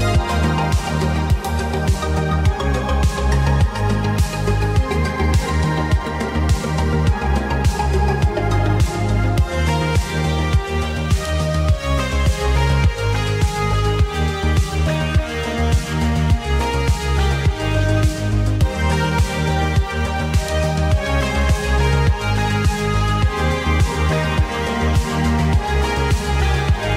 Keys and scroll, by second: 0.5 Tab, 2.0 Left, 3.4 Left, 3.9 Left, 5.4 Tab, 6.2 Left, 6.9 Left, 7.9 Tab, 9.2 Left, 9.7 Left, 10.2 Left, 11.4 Tab, 12.8 Tab, 13.3 Tab, 13.8 Left, 14.4 Left, 15.0 Left, 15.5 Left, 15.9 ], 16.1 -, 16.2 ctrl+KP_1, 17.2 Left, 18.5 Left, 20.6 g, 21.7-25.3 typing, 26.4 g.